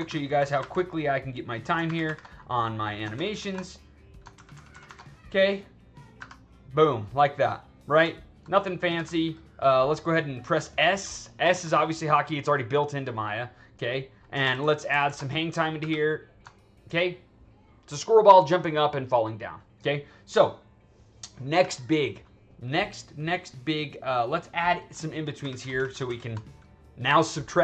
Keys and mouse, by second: 0.0 alt+a, 0.3 alt+a, 0.5 alt+a, 0.8-1.7 drag, 1.8 alt+s, 2.0 alt+s, 2.4 click, 3.1 alt+a, 3.3 alt+a, 3.6-4.1 drag, 4.3 alt+a, 4.5 alt+a, 4.6 alt+a, 4.8 alt+a, 4.9-5.9 drag, 6.1 2, 7.3 click, 8.3 alt+middle click, 8.9 2, 9.1-10.7 drag, 11.5 s, 13.7-14.2 drag, 14.4 alt+a, 14.8 alt+a, 15.2-15.6 drag, 15.7 2, 17.3 click, 20.3-20.7 drag, 21.4 2, 24.0 click, 25.3 alt+a, 25.5 alt+a, 25.8 alt+a, 26.0 alt+a.